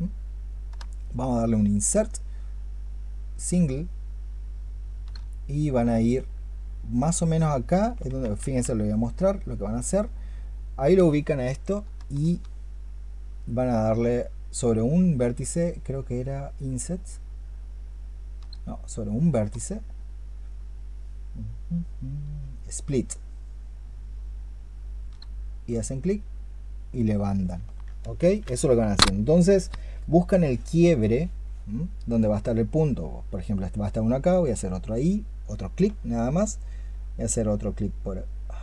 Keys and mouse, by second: 0.6-4.9 space, 8.0 space, 8.2 ctrl+z, 11.8-18.1 space, 19.3-25.0 space, 28.0 ctrl+z.